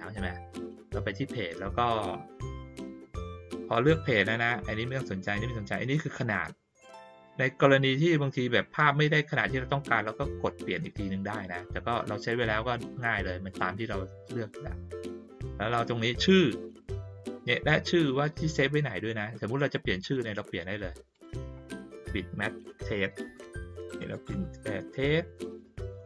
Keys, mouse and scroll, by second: 3.9 click, 20.0 click, 21.1 click.